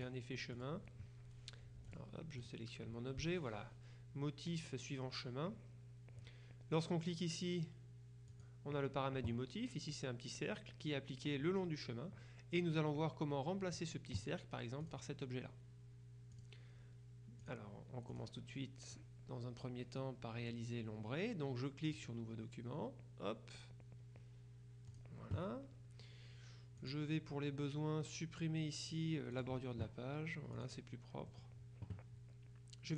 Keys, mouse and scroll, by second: 0.1-1.2 drag, 1.9 F2, 2.0 click, 8.4 click, 14.9 click, 16.4 click, 17.5 click, 18.2 click, 22.0 click, 25.0 click, 26.9 click, 29.4 click, 30.7 click, 31.4 middle click.